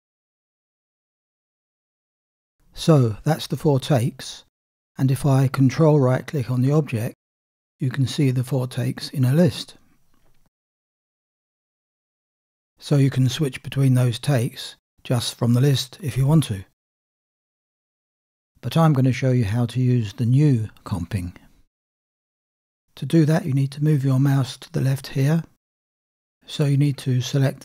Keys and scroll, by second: 0.9 space.